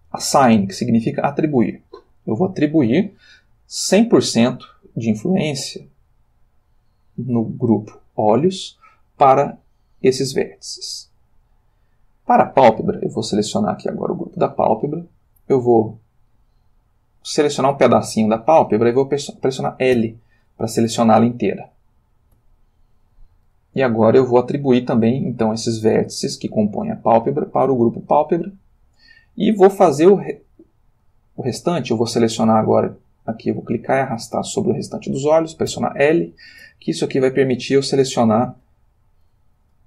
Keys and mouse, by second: 1.4 click, 13.3 click, 15.4 click, 17.0-17.9 drag, 19.9 l, 21.0 g, 22.4 Escape, 28.2 click, 31.0-32.0 drag, 32.9-34.1 drag, 34.1-35.2 middle drag, 35.7 l, 36.7 g, 38.6 Escape.